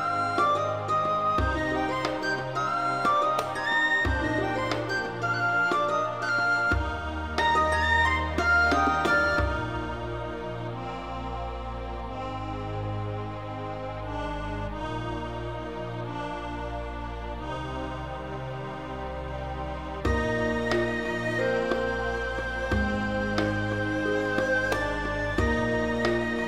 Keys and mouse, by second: 0.0-0.8 typing, 0.3 click, 0.6 click, 1.2 click, 1.6 click, 1.6 middle click, 2.1-3.7 middle drag, 3.8 middle click, 4.0 Tab, 4.1 shift+middle click, 4.3 middle click, 4.8 middle click, 5.1 Tab, 5.2 3, 5.4 middle click, 5.7 middle click, 6.0 g, 6.4 click, 6.5 middle click, 7.1 middle click, 7.4 g, 7.6 middle click, 7.8 click, 8.0 middle click, 8.2 alt+middle click, 8.3 middle click, 8.6 1, 8.7 middle click, 9.1 middle click, 9.4 click, 9.6 middle click, 9.8 g, 9.8 middle click, 10.1 click, 10.4 g, 10.4 middle click, 10.8 click, 11.0 middle click, 11.1 alt+middle click, 11.3 click, 11.5 alt+z, 11.6 shift+click, 11.9 click, 12.1-15.4 typing, 12.5 click, 12.6 click, 13.3 click, 14.1 click, 14.9 click, 15.2 click, 15.7 right click, 16.0 alt+z, 16.2 alt+z, 16.4 click, 16.6 middle click, 17.2 shift+click, 17.5 g, 17.6 g, 17.8 click, 18.0 alt+z, 18.1 alt+middle click, 18.2 alt+z, 18.5 click, 18.7 g, 19.6 right click, 19.9 click, 20.0 g, 20.6 click, 20.8 click, 21.1 g, 21.5 click, 21.8 click, 21.9 g, 22.4 right click, 22.7 g, 24.0 click, 24.1 middle click, 24.4 alt+z, 24.6 middle click, 24.9 Tab, 25.0 middle click, 25.5 middle click.